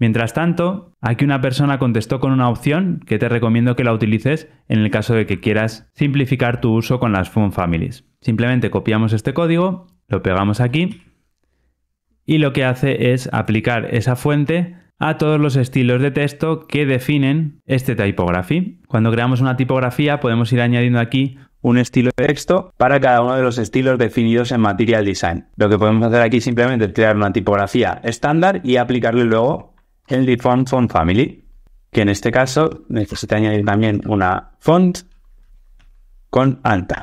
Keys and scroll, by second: 10.8 super+v, 27.6 super+Right, 29.9 Tab, 32.9 super+x, 35.4 Return, 35.6 super+v.